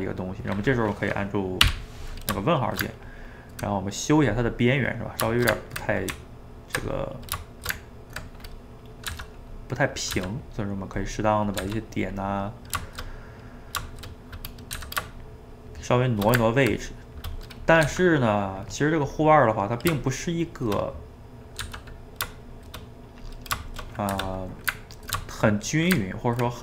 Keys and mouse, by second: 1.6 /, 2.6 shift+right click, 2.9-6.1 ctrl+middle drag, 6.1 Tab, 7.1 middle click, 7.6 shift+right click, 7.8 ctrl+middle click, 8.4 click, 8.7 middle click, 9.1 g, 9.9 click, 10.2 g, 10.8 middle click, 11.5 click, 11.6 g, 12.4-14.7 middle drag, 14.7 click, 14.8 g, 15.5-17.6 shift+middle drag, 17.6 click, 17.8 g, 19.0 click, 19.3-21.6 middle drag, 21.6 g, 23.7 shift+click, 23.9 middle click, 24.2 1, 24.5-25.8 middle drag, 25.8 shift+right click, 26.0-26.6 ctrl+middle drag.